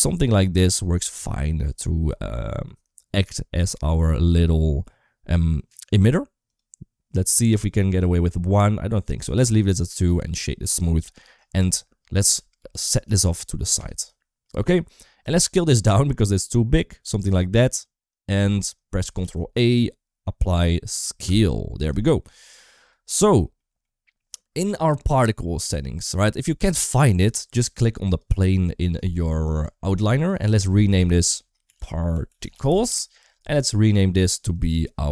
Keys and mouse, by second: 1.4 click, 6.3 click, 9.0 click, 11.0 shift+middle click, 12.1 g, 14.1 shift+middle click, 19.0 ctrl+a, 21.8 shift+middle click, 23.0 shift+middle click, 23.4 middle click, 27.9 click, 30.2-32.7 drag, 33.7 click, 34.1 click, 34.3-35.1 drag.